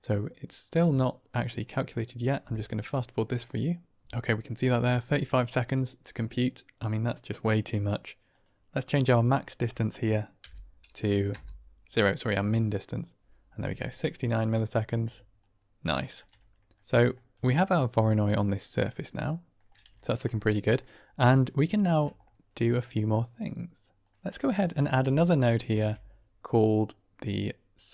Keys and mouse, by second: 8.2-13.1 drag, 14.4 middle click, 15.8 shift+middle click, 16.3 middle click, 17.1 middle click, 18.6-19.6 middle drag, 20.0 ctrl+middle click, 20.5 middle drag, 21.4 middle click, 21.7 shift+middle click, 24.0 middle click, 24.4 click, 24.9 g, 25.6 shift+a.